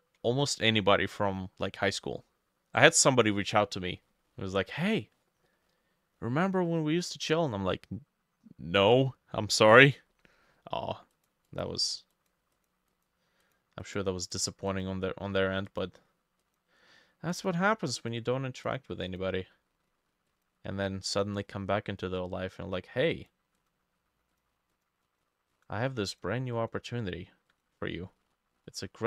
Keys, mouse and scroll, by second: 4.0 middle click, 5.5 middle click, 11.5 double click, 11.8 double click, 12.2 double click, 12.6 double click, 13.0 double click, 13.9 double click, 14.7 double click, 19.1 double click, 21.2 middle click, 23.6 double click, 24.8 double click, 25.1 double click, 25.6 double click, 26.6 double click.